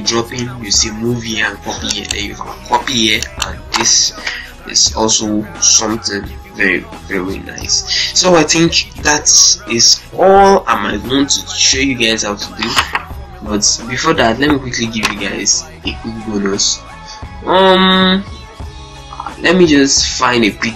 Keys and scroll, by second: 14.3 super+d.